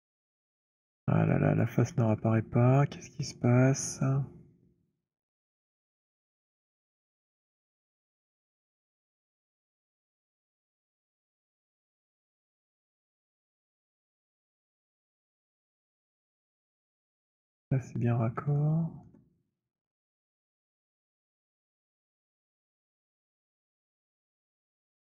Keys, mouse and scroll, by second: 0.4-1.4 scroll, 1.4 alt+click, 2.3 alt+scroll, 2.4 alt+middle click, 3.0 alt+click, 3.2 alt+middle click, 4.6 alt+middle click, 5.7 alt+middle click, 5.7 alt+right click, 6.8 alt+middle click, 7.2 alt+right click, 8.0 click, 10.3 right click, 11.5 click, 13.3-15.4 c, 16.2 c, 16.4 middle click, 16.4 c, 16.8 c, 18.2 middle click, 19.0 alt+middle click, 19.1 alt+middle click, 20.2 click, 22.2 alt+middle click, 24.3 click.